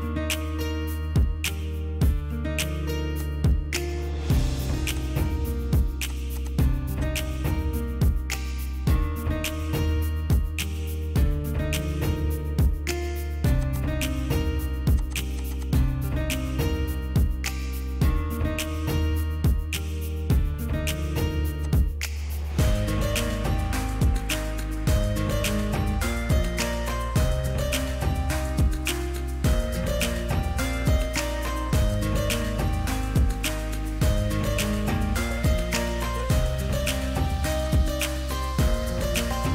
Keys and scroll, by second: 3.9 Delete, 7.9 ctrl+c, 8.3 Escape, 8.4 Escape, 10.2-11.8 typing, 12.4 ctrl+shift+BackSpace, 12.8 3, 13.0 Return, 14.8 ctrl+g, 17.3 ctrl+c, 17.7 Escape, 17.8 Escape, 19.3 ctrl+g, 20.0 q, 22.5-23.4 typing, 26.0 m, 27.8-30.1 typing, 37.5 p.